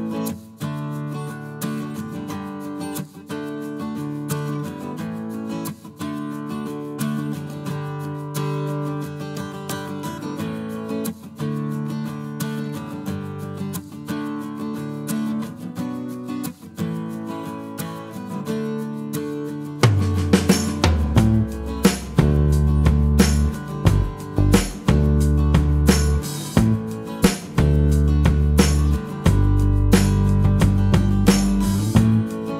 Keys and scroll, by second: 11.9 space, 13.1 space, 13.2 Escape, 15.9 Return, 17.0 space, 23.1 space.